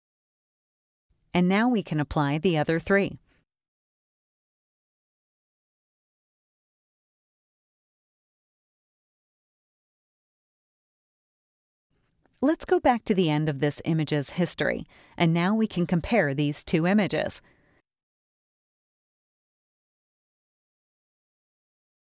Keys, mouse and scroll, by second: 4.7 click, 7.0 click, 13.5 click, 14.8 click, 17.5 click, 19.9 click.